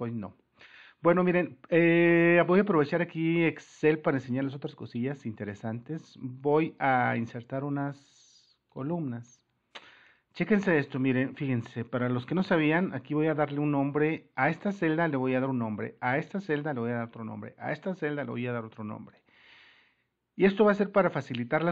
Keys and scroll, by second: 12.2 super++.